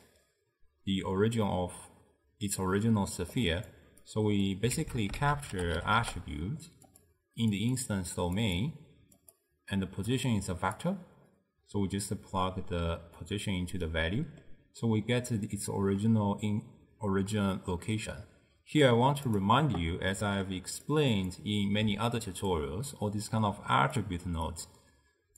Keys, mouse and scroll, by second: 3.5 click, 4.1 click, 4.8 ctrl+a, 7.6-10.9 drag, 11.9 drag, 13.9-15.5 middle drag, 15.5 drag, 20.2-21.0 middle drag, 21.0 click, 21.9-25.3 typing, 22.2 click, 23.0 click, 24.6 click.